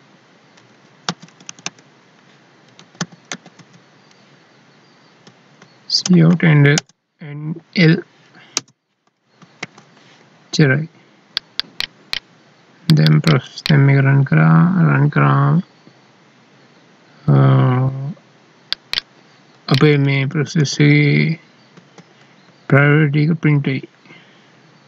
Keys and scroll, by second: 0.5 Left, 1.1 space, 1.3 Right, 5.2 Down, 9.4 ctrl+s, 19.9 ctrl+Down, 21.7 ctrl+s, 22.5 ctrl+Up.